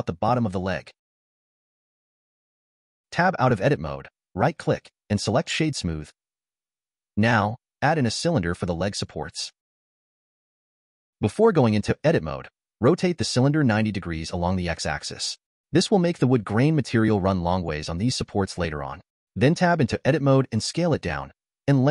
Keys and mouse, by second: 0.2 ctrl+b, 3.2 Tab, 3.8-4.9 drag, 5.2-6.7 drag, 7.1 shift+a, 10.0 r, 12.8 Tab, 13.4 s, 16.6 click, 19.0 s.